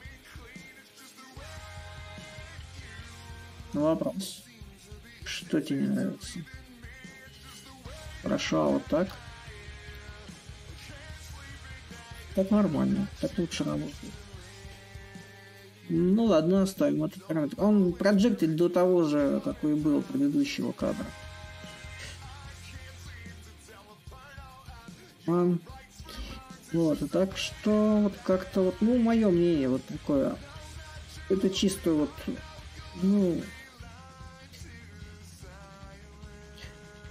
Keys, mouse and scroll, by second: 1.3 ctrl+z, 3.3-8.4 middle drag, 9.1-13.9 ctrl+drag, 14.2-15.4 shift+drag, 15.4-19.7 right drag, 19.7-25.0 shift+middle drag, 25.8-30.9 middle drag, 31.0-33.7 drag, 33.7 a, 34.9-37.1 drag.